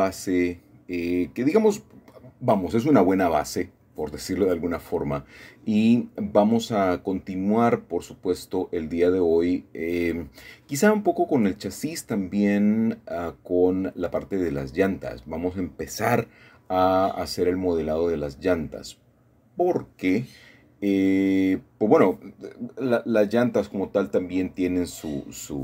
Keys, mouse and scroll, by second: 1.0 click, 2.5 h, 4.3 middle click, 5.3 middle click, 6.0 scroll up 1, 7.9 KP_1, 9.4 KP_3, 12.1 ctrl+KP_3, 14.2-14.8 scroll up 2, 14.8 click, 16.8 shift+middle click, 18.8 shift+middle click, 19.2-20.5 scroll up 1, 20.8-23.0 shift+middle drag, 24.5 k.